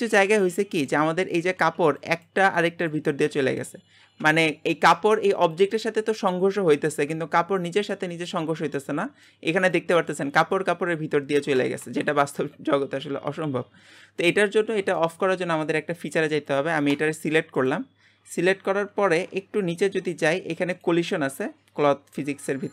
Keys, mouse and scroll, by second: 0.0-4.1 shift+middle drag, 4.4 middle click, 4.9-6.6 scroll down 1, 6.6-7.5 scroll down 1, 7.5-7.9 scroll up 2, 7.9 middle click, 8.4-8.8 scroll up 1, 8.8-13.7 middle drag, 13.7-14.2 scroll down 2, 14.2 middle click, 14.6-15.0 scroll down 2, 15.0-16.4 shift+middle drag, 16.4 click, 16.9 g, 18.3-18.7 scroll down 10, 19.9-20.7 scroll down 25, 20.7 click, 21.5-22.1 scroll down 10.